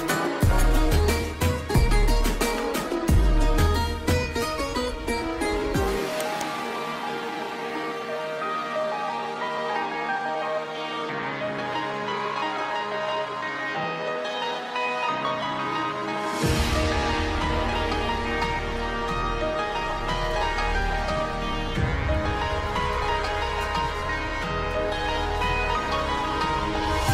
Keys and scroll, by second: 2.8 shift+Page_Down, 3.4 alt+c, 8.6 ctrl+Page_Down, 10.7 alt+c, 11.6 Escape, 12.4 F4, 15.8 shift+F2, 16.1 F3, 16.5 shift+Page_Up, 20.6 F4, 21.2 Escape.